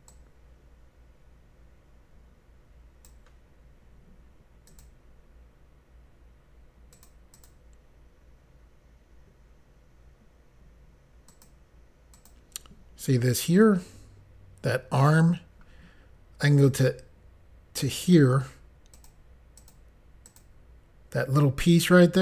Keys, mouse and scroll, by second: 0.2 click, 4.7 click, 7.0 click, 7.4 click, 11.4 click, 12.2 click, 16.7 click, 19.0 click, 19.7 click, 20.4 click.